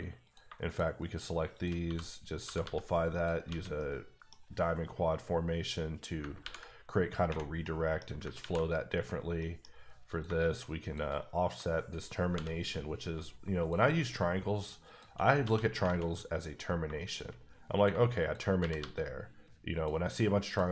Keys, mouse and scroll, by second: 0.2 click, 1.1 shift+double click, 1.7 shift+click, 1.8 f, 2.3 click, 2.4 g, 2.6 g, 3.1 click, 3.5 alt+a, 3.8 middle click, 6.4 ctrl+r, 7.6 middle click, 8.4 ctrl+r, 8.9 ⦸, 9.4 middle click, 10.1 click, 10.2 shift+click, 11.2 click, 12.3 j, 13.6 click, 14.6 shift+double click, 15.1 shift+click, 15.4 f, 15.8 alt+a, 16.5 click, 18.6 g, 18.8 g, 19.7 click, 20.5 click.